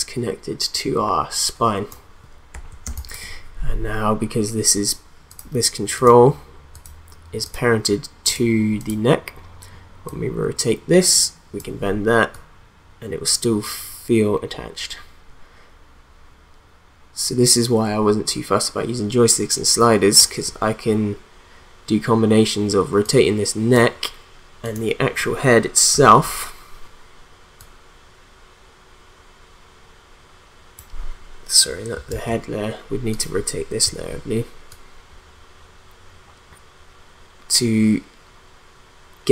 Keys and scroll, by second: 2.8 space, 25.9 r, 32.1 ctrl+z, 33.8 r.